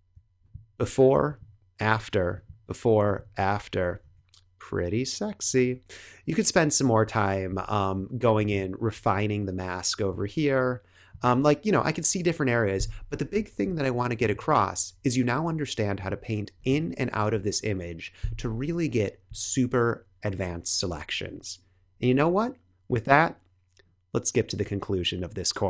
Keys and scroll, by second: 4.0 Tab, 7.4 Tab.